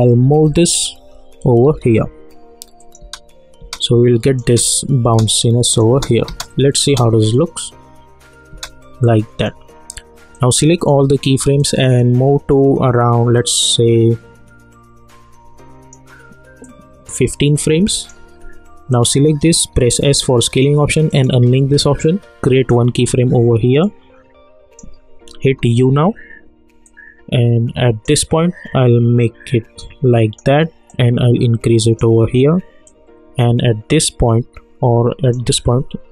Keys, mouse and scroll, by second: 0.0 Up, 2.8 click, 3.0 space, 3.9 click, 4.4 space, 5.3 click, 6.9 space, 9.0-18.9 drag, 19.8 s, 21.1-25.4 drag, 25.4 u, 26.8-36.1 drag.